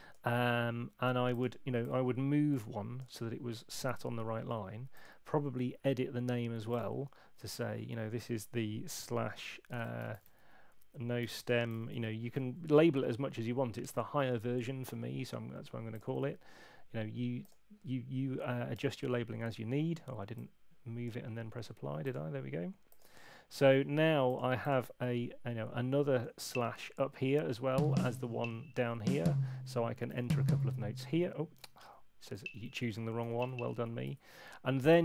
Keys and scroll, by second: 7.4 Right, 9.9-11.2 typing, 12.3 shift+0, 26.4 Down, 31.6 super+z, 31.8 super+z, 32.3 Up.